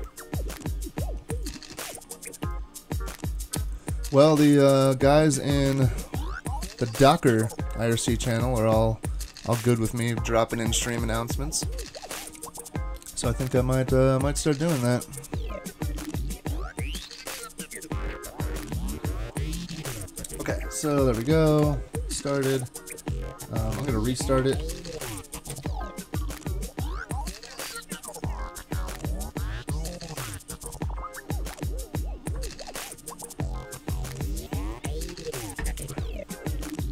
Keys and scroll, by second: 20.9 super+Tab, 21.6 super+Tab, 24.4 ctrl+r, 24.5-25.3 typing, 25.5 Return, 33.1 typing.